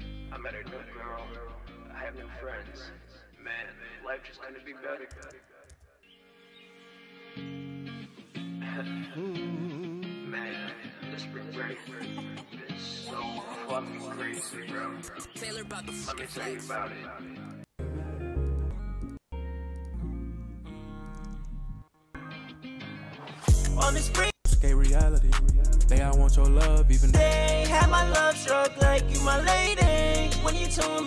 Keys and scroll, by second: 5.2 space, 5.6 super+s.